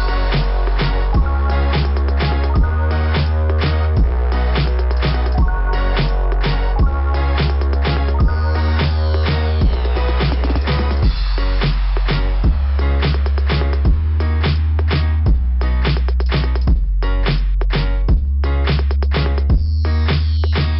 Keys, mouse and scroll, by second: 1.2 click, 3.2 click, 3.8 click, 4.2 click, 4.5 click, 11.1 scroll up 3, 13.2 click, 17.2 click, 19.5 click, 19.9 click.